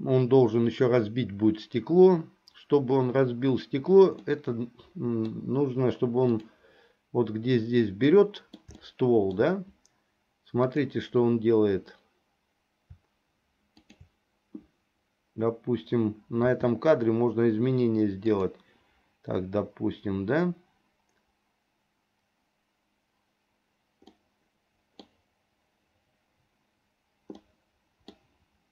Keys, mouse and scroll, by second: 4.3-5.5 middle drag, 6.4 click, 8.1 middle click, 8.9 shift+middle click, 10.7 click, 13.8 shift+click, 16.5 r, 24.2-25.2 middle drag, 27.5 middle click.